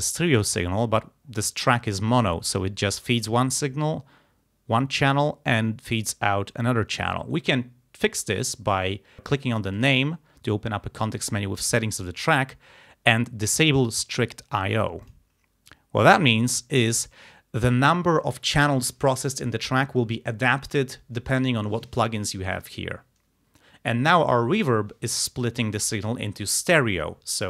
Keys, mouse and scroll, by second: 9.8 click, 15.1 click.